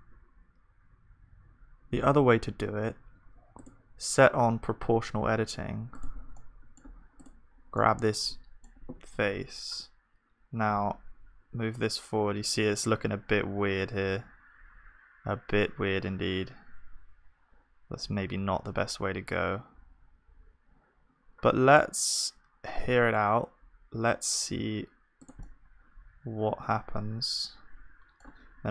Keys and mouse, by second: 6.3-9.2 drag, 6.3-13.0 middle drag, 9.3 g.